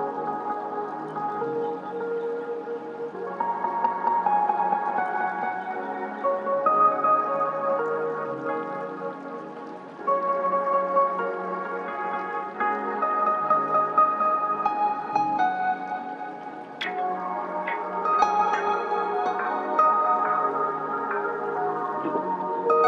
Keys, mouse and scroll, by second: 0.0-1.4 drag, 1.4-1.8 scroll up 1, 9.2 click, 9.2 typing, 12.7 click, 12.9 typing, 16.4 click, 16.4 typing.